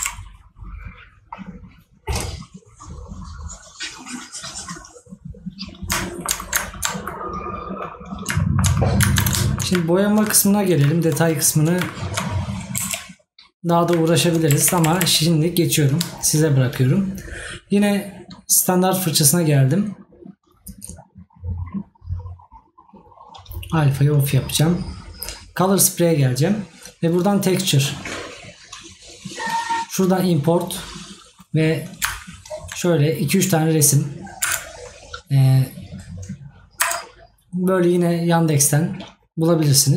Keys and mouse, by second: 6.2 right click, 8.4 right click.